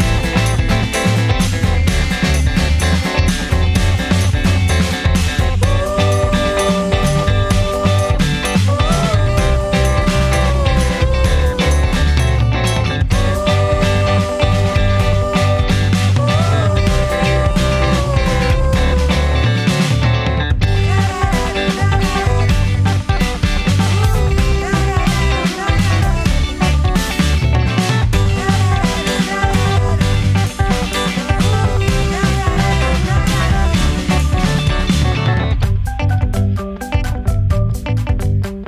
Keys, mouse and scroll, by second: 2.3 space, 4.8 Return, 7.3 scroll up 1, 9.0-11.2 middle drag, 11.2 click, 13.9 scroll down 1, 15.8-18.4 drag, 18.4 scroll down 1, 18.8 middle click, 19.4-28.0 drag, 28.0 middle click, 28.9-32.0 drag, 32.0 scroll up 1, 32.6 middle click, 33.1 scroll up 1, 34.1 middle click, 34.5-35.3 scroll up 1, 37.6 click.